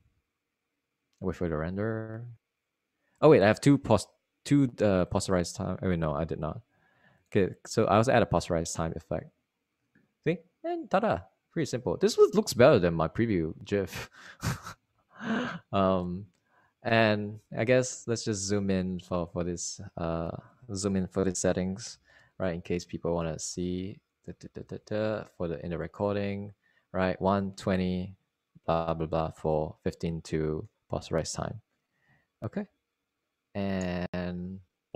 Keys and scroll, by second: 23.9 ctrl+alt+=, 24.9 alt+super+=, 25.4 alt+super+=, 33.6 alt+super+-, 34.1 alt+super+-.